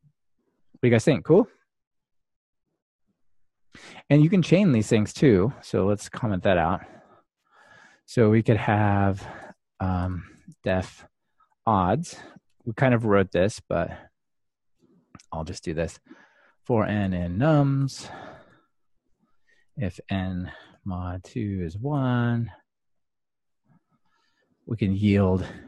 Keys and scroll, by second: 9.0 super+/.